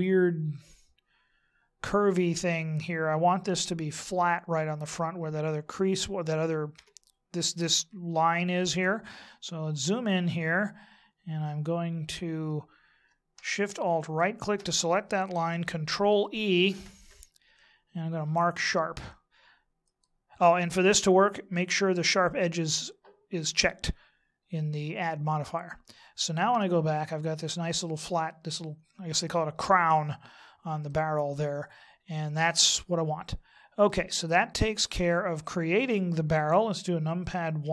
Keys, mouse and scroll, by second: 6.7 Tab, 9.4-10.4 scroll up 3, 14.0 alt+shift+right click, 26.5 Tab, 27.4 middle click, 29.8 scroll down 2, 30.8 middle click, 34.2 scroll down 2, 37.6 KP_1.